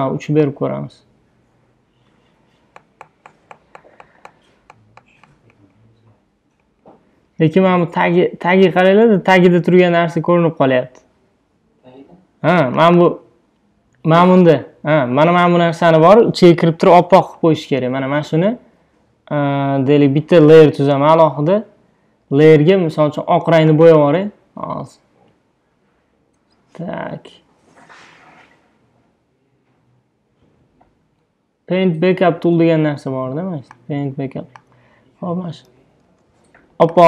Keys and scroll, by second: 36.1 super+s.